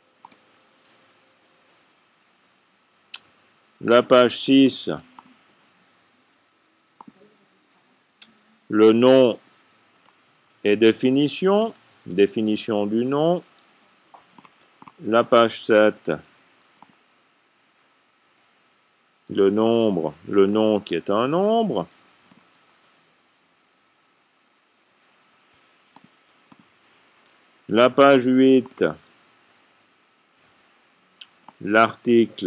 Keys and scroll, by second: 1.5 typing, 4.1-5.4 typing, 10.6 c, 12.4 typing, 15.8-16.5 typing, 21.0 c, 22.9-23.7 typing, 27.7 a.